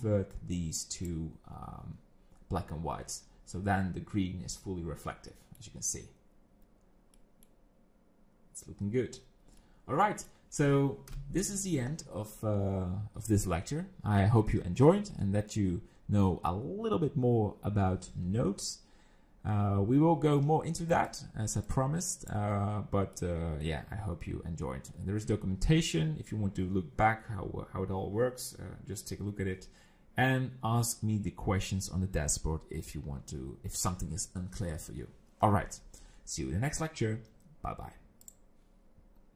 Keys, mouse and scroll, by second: 5.3 middle click, 7.2 middle click, 9.3-9.9 scroll down 3, 9.7 middle click, 11.1 KP_0, 21.1 click, 21.7 click, 22.7-24.8 scroll down 2, 23.2 middle click.